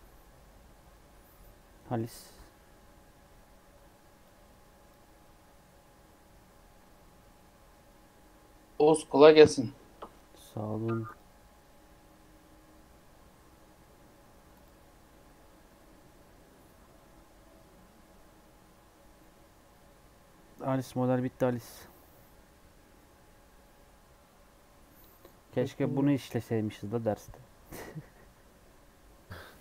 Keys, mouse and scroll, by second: 4.2-7.3 drag.